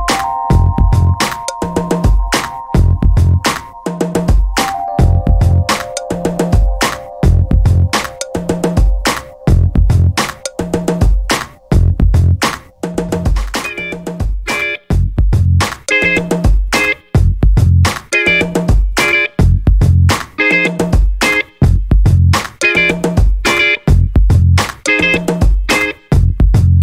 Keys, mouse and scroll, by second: 0.8 click, 2.8 5, 3.4 0, 5.5 shift+8, 7.2 x, 8.4 0, 9.6 shift+8, 10.9 3, 12.4 click, 14.1 5, 14.4 0, 16.0 shift+8, 17.9 0, 18.9 shift+8, 20.3 3, 21.7 click, 23.1 4, 23.9 3, 24.6 ., 25.6 3.